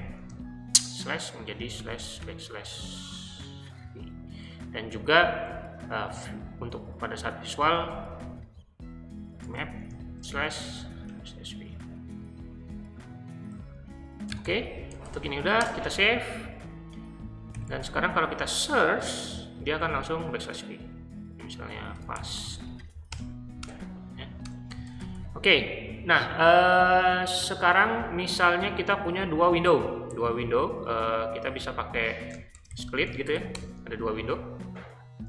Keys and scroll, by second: 0.0-3.8 typing, 4.4 Return, 6.1 v, 7.4-12.0 typing, 14.2-15.5 typing, 15.6 Return, 17.3-18.0 typing, 19.8 /, 21.7-25.2 typing, 24.4 Return, 32.3-33.8 typing.